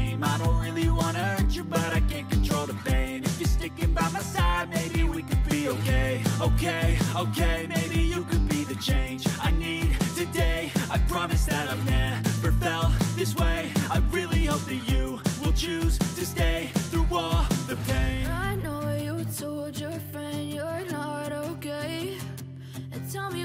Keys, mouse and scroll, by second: 5.2-8.9 typing, 9.1 ctrl+a, 14.0 double click.